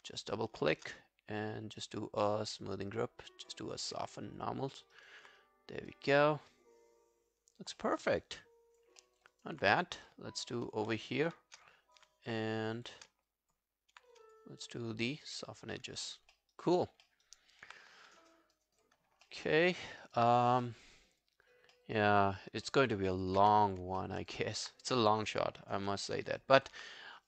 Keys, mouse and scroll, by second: 0.0 scroll down 2, 0.2 alt+click, 3.7 double click, 4.0 scroll down 1, 4.1 alt+click, 4.7 alt+middle click, 4.9 alt+scroll down 1, 5.0 alt+right click, 6.3 scroll down 3, 6.5 alt+click, 7.8 alt+middle click, 8.0 alt+right click, 8.3 alt+click, 9.0 alt+middle click, 9.3 alt+right click, 11.7 alt+click, 12.8 shift+click, 13.3 alt+click, 15.4 double click, 15.7 scroll down 3, 16.0 alt+click, 16.3 alt+middle click, 16.5 alt+right click, 16.8 alt+click, 17.1 alt+middle click, 17.3 alt+right click, 19.0 scroll down 1, 19.3 alt+middle click, 19.5 alt+right click, 19.8 alt+middle click, 20.0 alt+right click, 20.3 alt+click, 20.7 alt+middle click, 20.9 alt+right click, 21.1 alt+click, 21.7 alt+middle click, 22.0 alt+right click, 22.2 alt+click, 22.7 alt+middle click, 22.9 alt+right click, 23.1 alt+click, 23.4 q, 24.0 alt+middle click, 24.2 alt+right click, 24.4 alt+click, 24.8 right click.